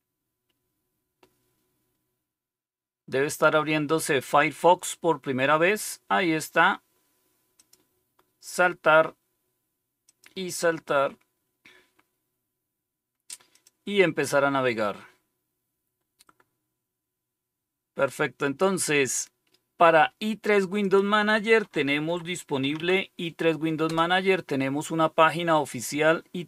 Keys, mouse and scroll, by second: 7.5 click, 10.0 click, 13.5 click, 20.8 click, 21.6-23.2 typing, 23.8 Return.